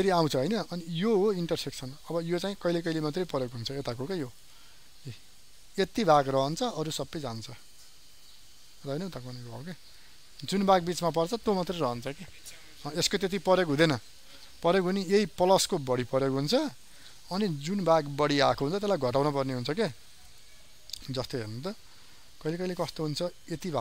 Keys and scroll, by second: 21.6 ctrl+d.